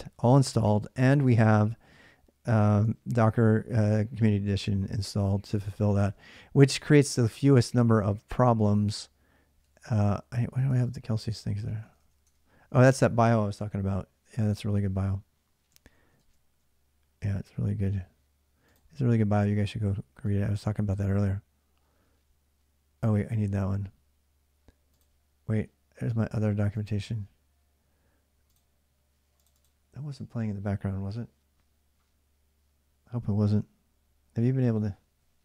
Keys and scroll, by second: 2.6 alt+Tab, 2.7 alt+Tab, 4.6 alt+Tab, 9.4 alt+Tab, 10.5 alt+Tab, 11.2 alt+Tab, 11.4 alt+Tab, 11.6 alt+Tab, 11.8 alt+Tab, 12.0 alt+Tab, 16.0 alt+Tab, 20.3 alt+Tab.